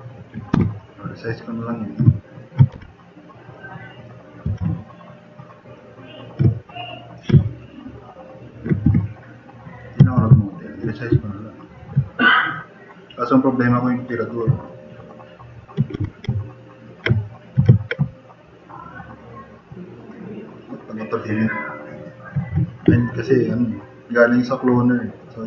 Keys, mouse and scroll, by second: 0.5 t, 2.7 e, 4.5 r, 8.9 t, 9.2 drag, 10.1 e, 10.4 drag, 16.0 r, 23.4-23.8 drag, 25.2 click.